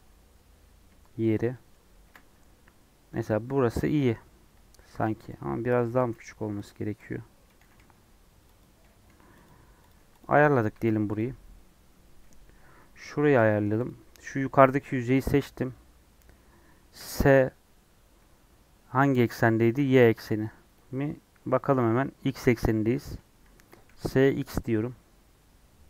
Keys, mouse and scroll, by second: 0.5 scroll up 1, 0.9-4.3 shift+middle drag, 4.3 1, 5.0 alt+z, 5.6 click, 5.8 g, 7.4 click, 7.6 g, 8.8 g, 9.8 click, 9.9 3, 10.1 click, 10.7 alt+z, 11.1 click, 13.1 shift+middle click, 13.3 scroll up 2, 13.8 click, 16.9 s, 20.8-21.4 scroll down 5, 22.4 scroll down 1, 22.4-23.1 scroll up 6, 23.5 scroll down 4.